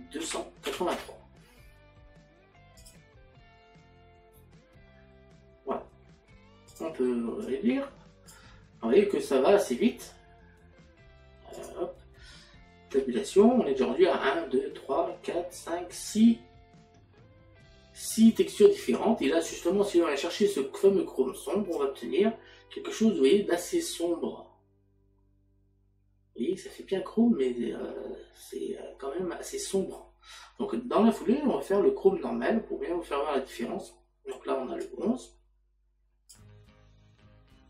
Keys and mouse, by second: 1.9 KP_3, 11.5 click, 34.8 click.